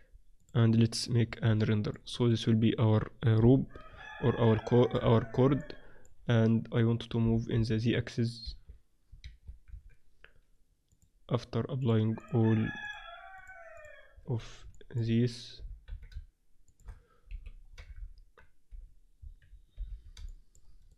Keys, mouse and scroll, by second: 0.3-1.6 drag, 1.6-3.4 middle drag, 3.4 KP_1, 3.8 middle click, 4.2 z, 5.0 z, 7.0 middle click, 7.4 g, 7.7 click, 9.6 z, 10.9-15.3 drag, 15.3 middle click, 15.7 g, 15.9 middle click, 17.2 KP_1, 18.0 z, 18.7 h, 19.7 alt+h.